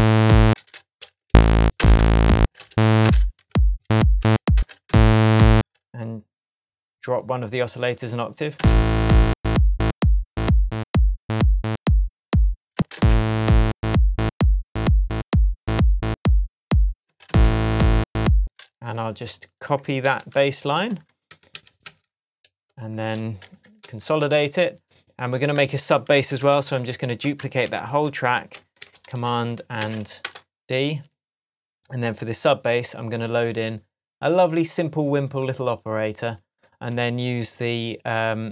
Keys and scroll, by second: 1.2 shift+Down, 1.7 shift+space, 2.7 shift+Up, 3.0 shift+space, 4.2 shift+Tab, 4.5 shift+space, 8.5 space, 12.7 space, 17.0 space, 18.4 space, 20.0 super+j, 21.2 super+d, 22.6 shift+super+d, 23.8 shift+super+j, 26.5 super+d, 28.2 super+Left, 28.5-29.6 typing, 38.4 space.